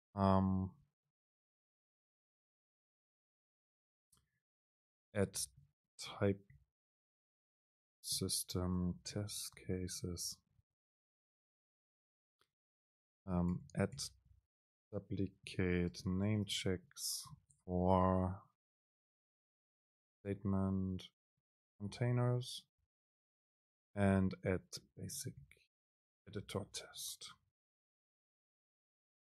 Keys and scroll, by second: 1.8 super+k.